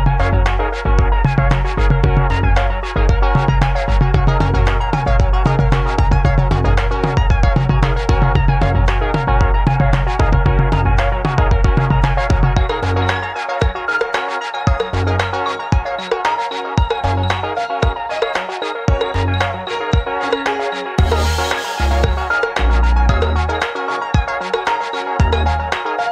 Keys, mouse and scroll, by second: 0.0-5.6 drag, 0.0-5.6 middle drag, 0.0-6.6 right drag, 6.6-19.8 middle drag, 14.0 click, 14.0 right click, 16.8 s, 19.8-26.1 right drag.